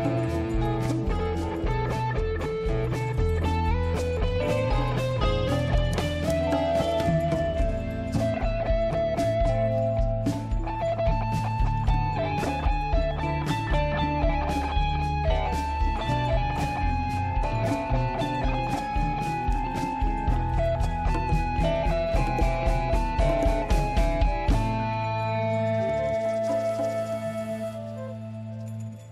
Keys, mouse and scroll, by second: 0.3 click, 1.1 click, 2.5 click, 6.4 click, 7.9 click, 8.8 click, 11.9 click, 14.9-15.5 scroll down 1, 15.5-16.1 scroll up 1, 17.2 click, 20.4 click, 21.0 click, 24.0 click, 25.3 click, 25.5 click, 25.9 click.